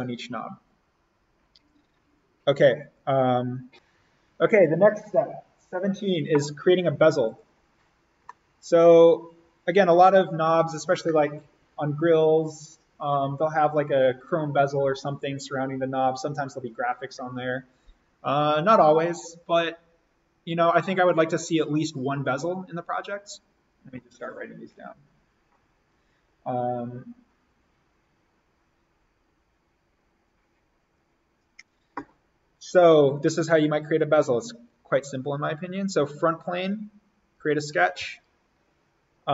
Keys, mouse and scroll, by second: 3.7 click, 7.3 click, 8.1 scroll up 1, 8.3 middle click, 8.5 scroll, 37.6 alt+s, 38.0 alt+n, 39.1-39.3 scroll down 1.